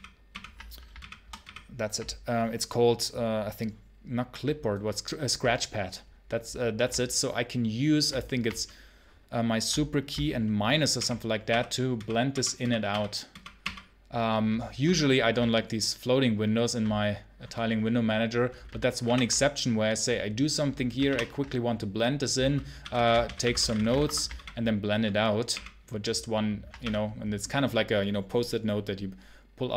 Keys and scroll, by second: 0.8 shift+-, 10.8 -, 12.7 -, 13.4 -, 18.9 super+-, 20.9 super+-, 22.4-24.2 typing, 26.7 o.